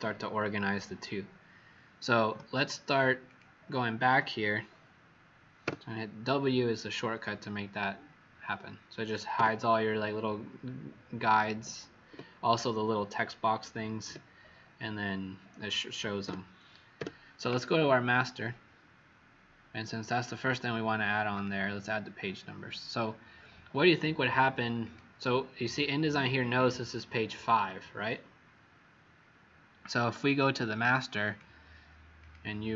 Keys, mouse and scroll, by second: 2.3 z, 3.2 click, 5.6 w, 16.2 w, 21.2 click, 31.2 click, 32.1 click.